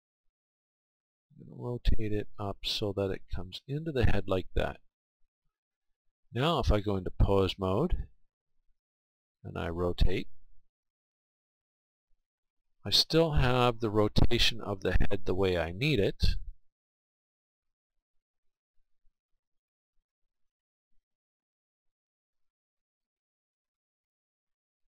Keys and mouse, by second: 1.0 r, 3.8-6.7 drag, 7.5-10.1 drag, 10.1 r, 12.8 r, 15.5-17.3 right drag, 16.4 click, 17.0-18.8 middle drag, 18.1 r, 20.9-23.1 right drag, 21.5-22.7 middle drag, 22.7 click, 23.1-24.9 middle drag.